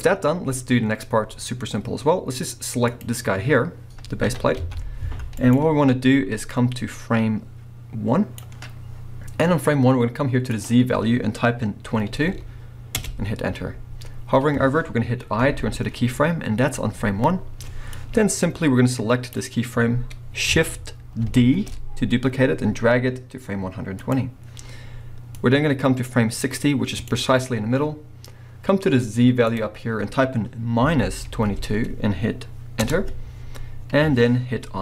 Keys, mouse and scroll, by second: 0.3-1.8 middle drag, 0.3 scroll up 1, 2.9 click, 3.4-3.9 scroll down 1, 4.2 r, 5.5 right click, 6.5-11.6 drag, 12.1 2, 13.1 Return, 17.9 click, 18.0 click, 20.0-24.1 drag, 21.2 shift+d, 25.4-34.8 drag, 31.5 2, 32.9 Return.